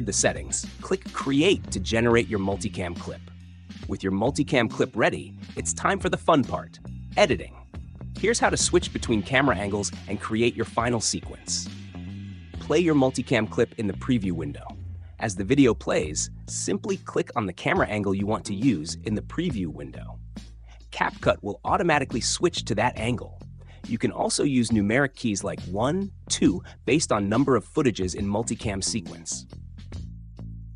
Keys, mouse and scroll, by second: 13.9 click, 14.7 space, 21.5 3, 30.0 1.